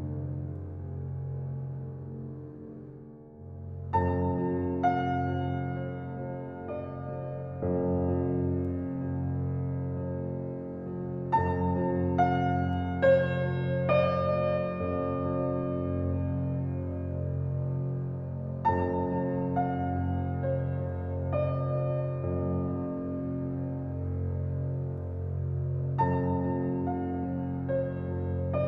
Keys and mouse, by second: 2.6 shift+click, 3.2 2, 3.4 click, 3.9 shift+click, 4.3 s, 6.0 1, 6.7 click, 8.0 shift+click, 8.5 s, 12.7 click, 14.6 click, 15.1 g, 23.3 Tab.